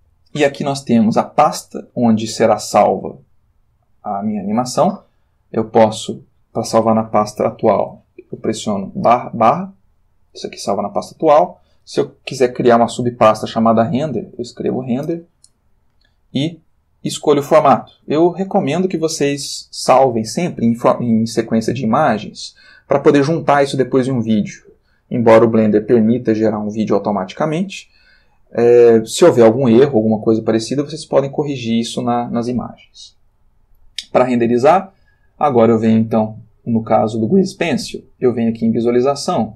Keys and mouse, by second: 6.0 click, 7.7 /, 8.5 Return, 10.3 click, 11.0 click, 13.7-14.7 typing, 15.1 Return, 24.6 click, 38.6 click.